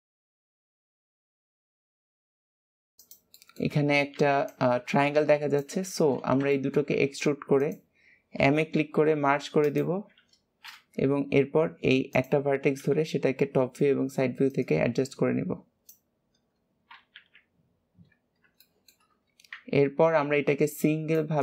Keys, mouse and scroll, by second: 0.4 KP_3, 1.0 click, 1.7 click, 2.0 click, 2.5 shift+middle click, 3.0 shift+click, 3.3-6.3 shift+middle drag, 6.5 shift+middle click, 6.8 e, 14.4 click, 16.1-17.1 scroll down 3, 17.1 KP_3, 18.0-18.6 scroll up 1, 18.6 shift+middle click, 19.1-20.7 scroll up 1.